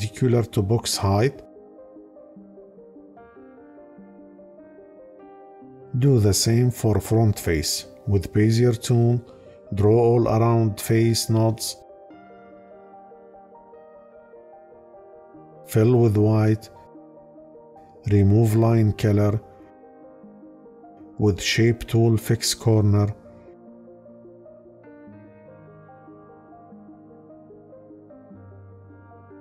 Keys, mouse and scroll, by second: 15.6 click, 18.2 right click.